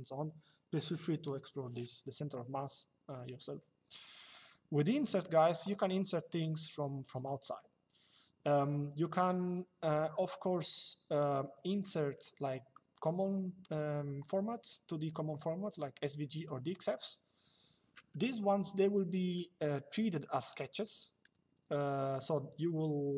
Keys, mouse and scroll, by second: 10.4 click.